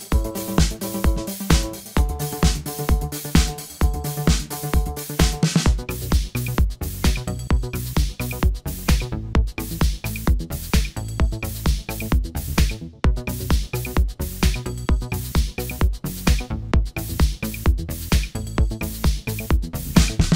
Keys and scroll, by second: 15.9 1.